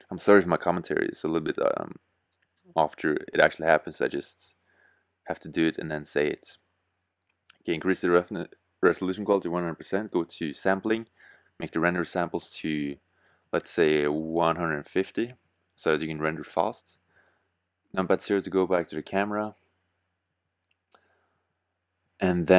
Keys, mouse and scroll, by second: 16.4 KP_0.